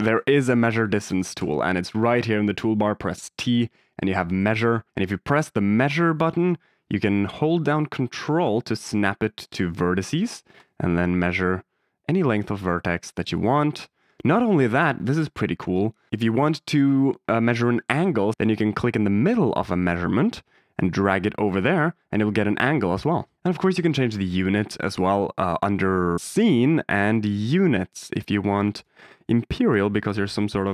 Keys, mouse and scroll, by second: 0.5 click, 5.8 click, 7.0 middle drag, 10.5 ctrl+click, 13.1 ctrl+click, 14.7 shift+middle drag, 18.3 d, 19.6 click, 23.3 d, 27.2 click, 27.8 click, 28.7-29.7 drag.